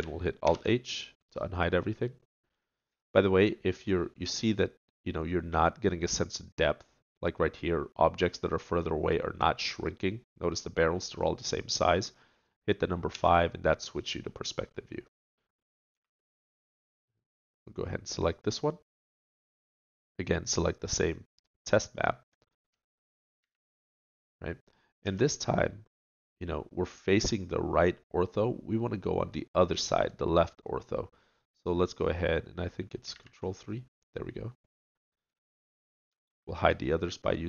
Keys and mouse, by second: 0.4 alt+h, 4.0 right click, 13.1 KP_5, 15.9 a, 17.4 click, 18.2-22.0 middle drag, 23.4 KP_3, 25.0 KP_5, 36.2 shift+h.